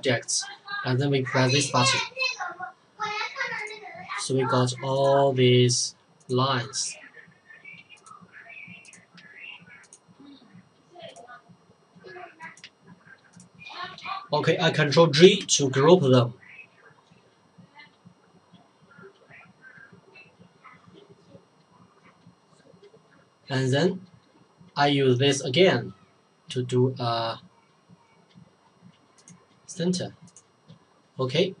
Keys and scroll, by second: 15.2 ctrl+g.